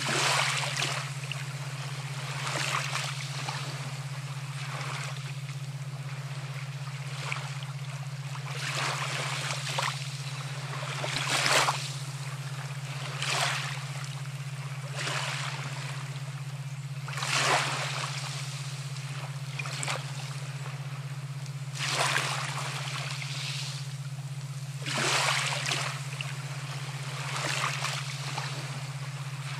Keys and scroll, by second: 2.6 ], 17.4 space.